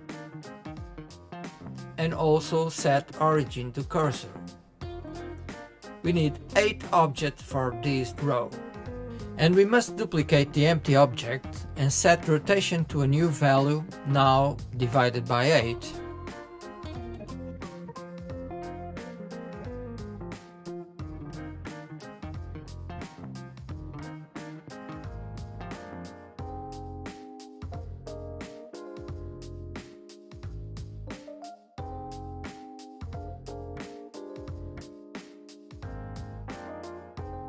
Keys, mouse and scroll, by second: 0.2 ctrl+a, 2.6 space, 5.3 click, 6.7 click, 8.2 shift+d, 11.3 click, 13.6-14.6 drag, 16.4 click, 20.9 click, 21.6 click, 27.8 click, 29.9 click, 30.8 KP_7, 31.6-32.0 shift+middle drag, 32.0-32.5 scroll down 3, 32.6-34.1 middle drag, 35.7 click, 36.1-37.4 middle drag.